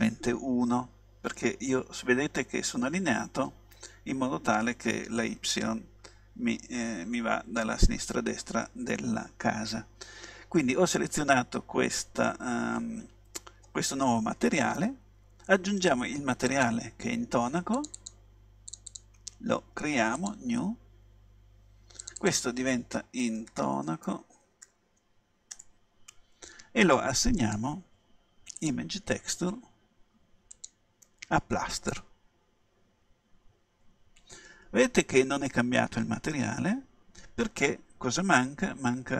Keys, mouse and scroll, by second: 16.6-24.2 drag, 27.5-29.3 drag, 30.6-32.4 drag, 36.4-38.4 middle drag.